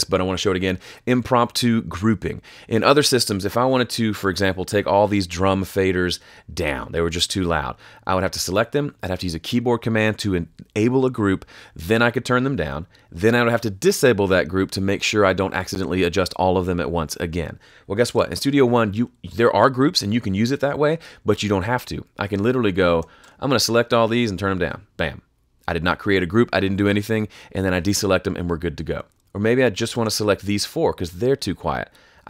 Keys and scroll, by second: 18.0 super+z.